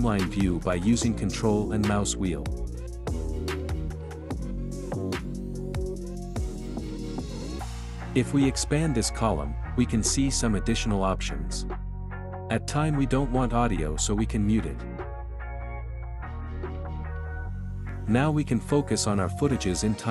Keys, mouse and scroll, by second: 1.0-1.5 ctrl+scroll up 1, 2.7-3.2 ctrl+scroll up 2, 3.2-4.4 ctrl+scroll up 1, 4.4 ctrl+scroll down 2, 9.3-12.0 drag, 12.0 click, 17.7-20.1 drag.